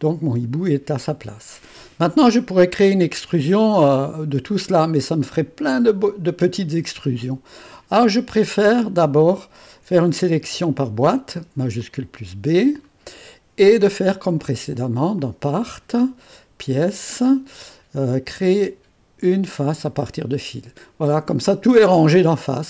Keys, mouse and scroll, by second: 2.4-3.6 drag, 8.6-10.1 right drag, 10.4 shift+b, 11.8-13.4 drag, 14.4 click, 14.8 click, 15.6 click, 16.6 click, 17.1 click, 19.5 click.